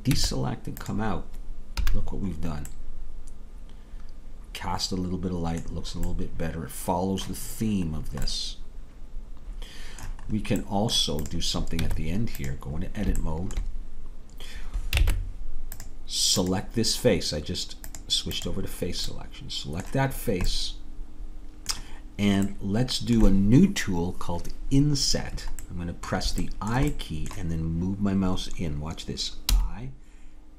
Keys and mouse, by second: 0.1 Tab, 1.8 a, 11.8 Tab, 11.8-14.2 drag, 15.1 ctrl+Tab, 17.2-22.5 drag, 19.2-22.5 middle drag, 29.6 i.